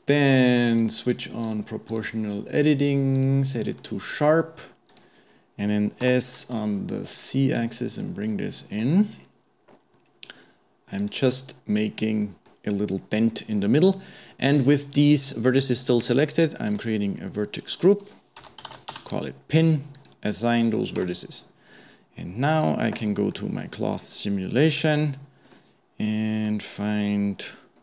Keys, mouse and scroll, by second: 0.7 click, 1.5 click, 1.9-3.8 drag, 3.8-4.9 middle drag, 4.9 click, 11.4-14.3 middle drag, 15.9 click, 16.7 click, 17.6 click, 17.8-20.4 drag, 21.1 Tab, 21.4-22.6 scroll down 2, 22.6 click, 23.1 scroll down 1, 23.4-27.6 middle drag, 27.6-27.8 scroll up 2.